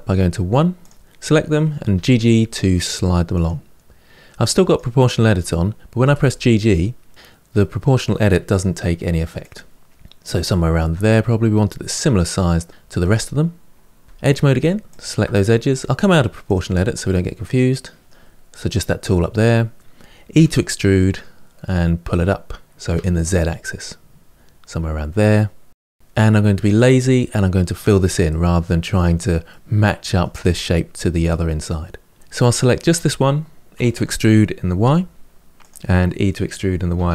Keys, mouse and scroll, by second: 0.6 click, 1.7 g, 4.4 click, 5.8 g, 12.1-14.0 middle drag, 14.0 2, 14.6 alt+click, 16.2 click, 16.8-19.9 middle drag, 20.1 e, 25.3-27.6 middle drag, 28.0-32.2 middle drag, 32.2 ctrl+z, 32.3 click, 33.5 e, 36.7 e.